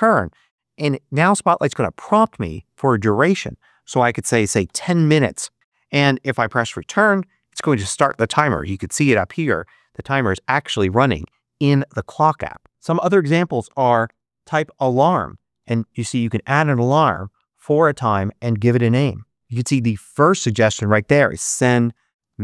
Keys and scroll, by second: 4.2-5.1 typing, 6.5 Return, 13.4-15.0 typing, 15.4 Return, 21.3-22.4 typing.